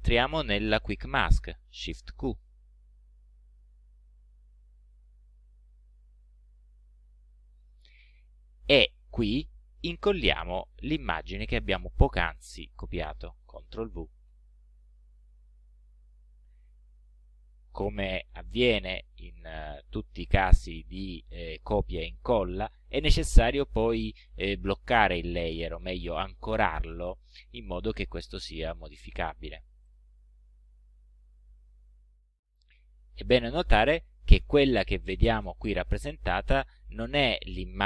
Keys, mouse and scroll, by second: 2.3 shift+q, 5.0 click, 14.3 ctrl+v, 29.9 click.